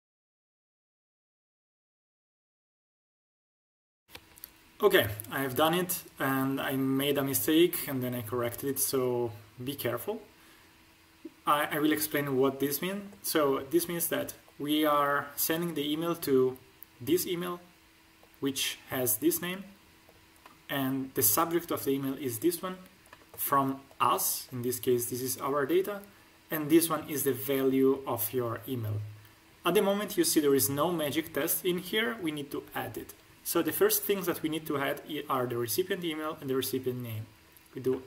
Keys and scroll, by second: 0.6 shift+., 2.7 shift+n.